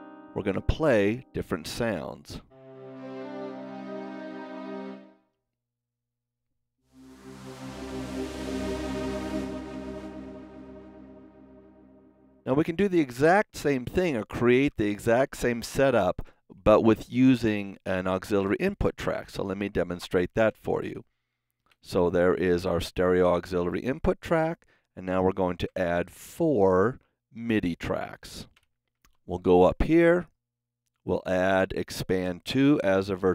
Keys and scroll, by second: 19.2 shift+super+n, 20.3 super+Right, 20.4 super+Down, 25.6 KP_4, 28.0 KP_4, 28.5 Home, 28.9 super+s.